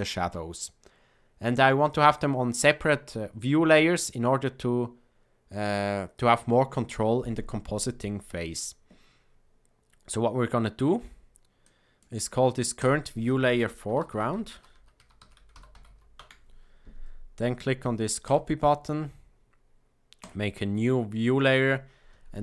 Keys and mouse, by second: 11.5 click, 12.9-16.9 drag, 18.3-20.3 drag, 21.4-22.4 drag.